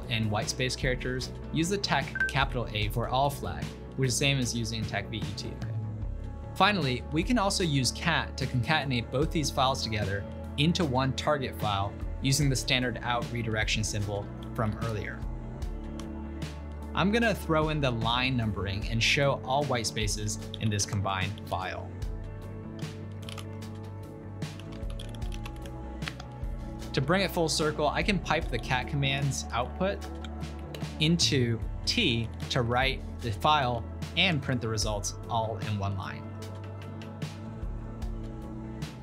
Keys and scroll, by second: 0.0 Right, 0.2 Right, 0.3 Right, 0.5 Right, 1.5 BackSpace, 2.3 shift+a, 3.4 Return, 4.0 ctrl+p, 4.3 ctrl+Left, 4.5 ctrl+Left, 4.5 ctrl+Left, 4.8-6.6 typing, 14.1-16.8 typing, 20.3-26.6 typing, 28.5 ctrl+p, 29.2 ctrl+w, 29.6 ctrl+w, 30.1-30.7 typing, 32.0-36.5 typing, 38.9 typing.